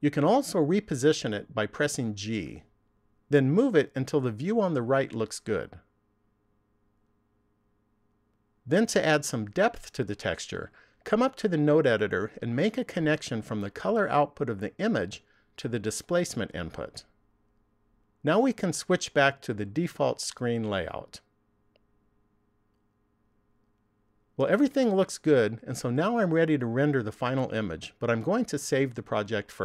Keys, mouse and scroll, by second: 22.1 click.